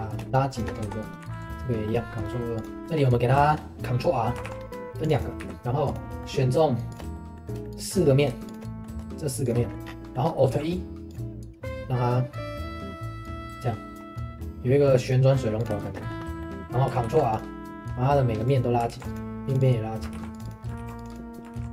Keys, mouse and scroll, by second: 1.1 right click, 1.1 middle click, 1.2 ctrl+2, 1.6 middle click, 2.2 right click, 2.8 ctrl+r, 2.8 shift+middle click, 3.1 scroll up 1, 3.4-4.4 shift+middle drag, 4.4 ctrl+r, 5.4 3, 5.8 click, 6.2 middle click, 6.9 shift+click, 7.1-8.5 middle drag, 8.5 shift+click, 8.6 middle click, 9.4 shift+click, 9.6 middle click, 9.8 scroll down 1, 10.0 middle click, 10.2 scroll up 1, 10.5 alt+e, 15.8 shift+middle click, 16.2 scroll up 1, 16.4 middle click, 17.0 ctrl+r, 18.9 ctrl+r, 20.1 ctrl+r.